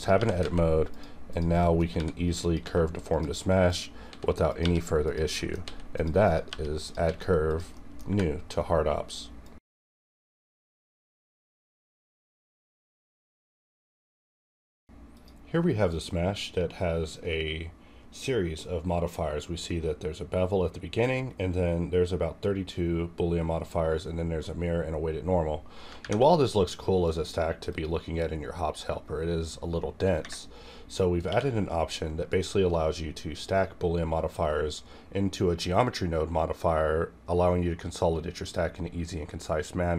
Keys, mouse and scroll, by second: 0.0 click, 0.2 g, 0.4 z, 0.9 click, 1.6 middle click, 1.9 r, 2.4 click, 2.5 s, 3.1 click, 4.0 s, 4.5 click, 4.6 r, 5.0 click, 5.4 middle click, 5.6 s, 5.9 click, 6.5 g, 6.8 click, 6.9 s, 7.5 click, 7.6 middle click, 7.7 middle click, 8.1 Tab, 8.4 scroll down 1, 16.7 scroll down 1, 17.3-17.7 scroll down 1, 18.8-20.8 scroll up 1, 20.8 scroll, 20.8-21.2 scroll down 1, 22.7-23.1 scroll down 1, 25.9 ctrl+Num_Lock, 25.9 scroll down 1, 26.2 ctrl+`, 27.0 click, 27.0 click, 28.3 scroll down 1, 28.7-30.7 scroll up 1, 31.3 q, 33.4 click.